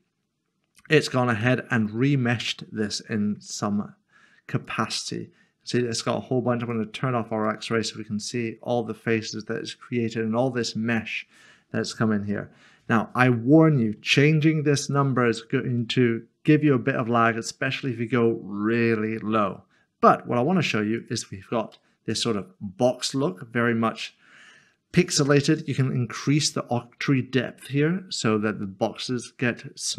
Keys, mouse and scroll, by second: 4.6 middle click, 21.0 middle click, 21.1 click, 21.7 middle click, 25.3 click.